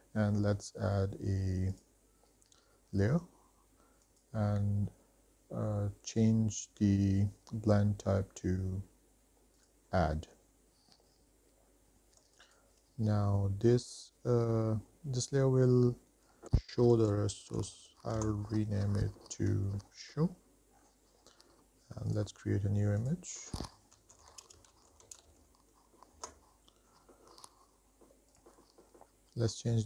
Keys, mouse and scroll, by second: 1.9 click, 7.9-9.9 drag, 15.7-18.4 drag, 20.4-22.1 scroll down 5, 22.3-25.6 drag, 27.5 click, 28.1 shift+middle click, 28.5-29.0 drag.